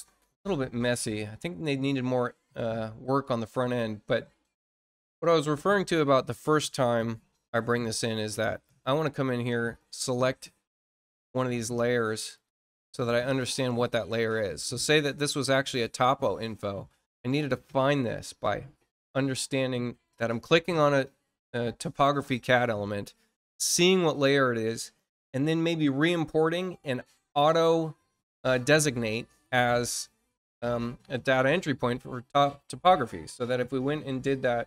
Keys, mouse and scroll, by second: 0.4-1.2 scroll down 4, 1.7-2.1 scroll up 2, 2.4 scroll up 2, 4.5 click, 7.6 click, 11.0 click, 12.3 click, 13.2 click, 14.9-15.3 scroll up 2, 33.7 click.